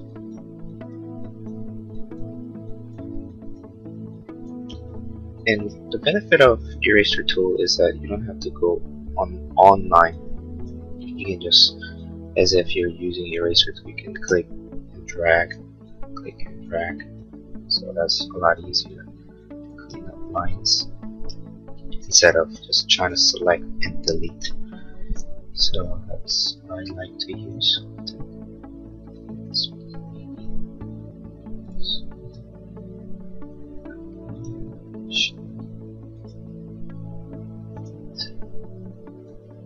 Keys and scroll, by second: 21.9 space, 25.6 l.